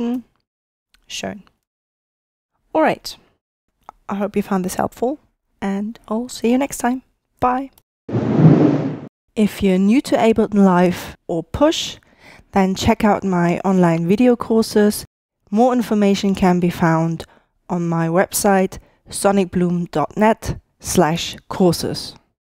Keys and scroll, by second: 0.5 alt+super+o.